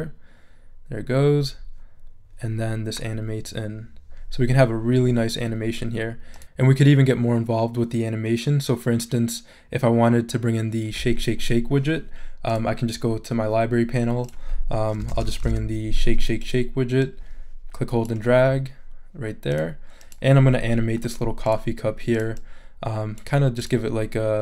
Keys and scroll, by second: 14.8-16.0 typing.